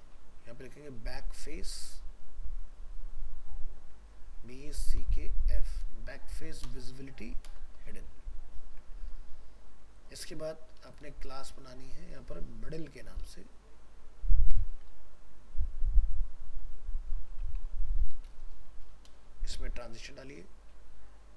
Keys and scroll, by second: 8.6 ctrl+s.